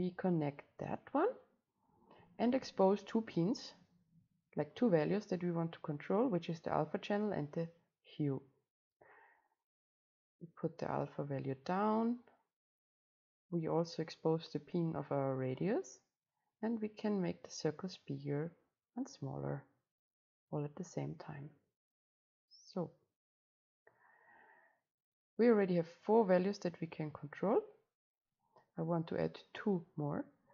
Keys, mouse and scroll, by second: 0.0-5.1 drag, 5.1-7.0 middle drag, 7.0 click, 7.9-8.9 middle drag, 8.9-15.1 right drag, 15.1 click, 16.0-17.0 middle drag, 17.0-19.9 right drag, 20.4-26.0 right drag, 26.0-30.5 drag.